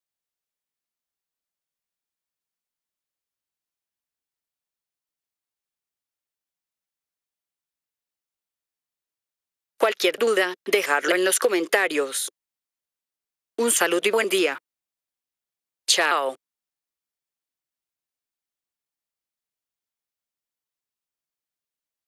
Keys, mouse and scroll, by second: 2.6 click.